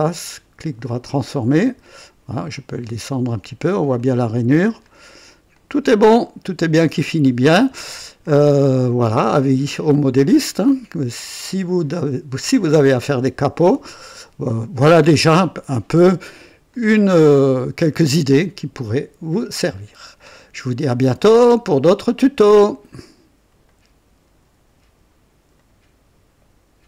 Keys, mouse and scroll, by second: 0.0 right click, 0.8 click, 2.5-3.8 drag, 3.9 click, 4.8 click, 5.5 click, 6.6 click, 8.2-9.0 drag, 10.4-16.3 drag, 16.7-20.1 drag, 20.3-21.0 drag, 21.2-22.3 right drag, 23.6 right click, 25.5 right click, 26.8 click.